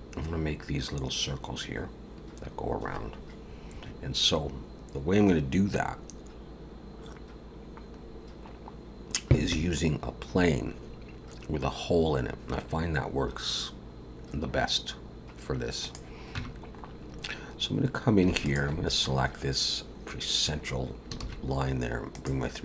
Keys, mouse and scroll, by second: 0.0 scroll down 2, 0.1 click, 15.8 click, 16.4 Tab, 16.7 scroll up 2, 18.4 alt+shift+click, 21.2 shift+s.